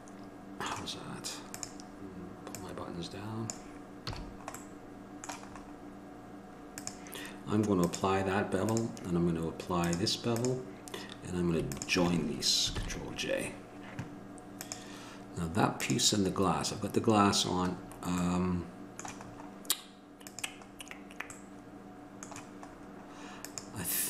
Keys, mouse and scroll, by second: 1.8-3.6 drag, 4.3 a, 4.4 middle click, 6.9 click, 13.0 ctrl+j, 20.4-24.0 drag.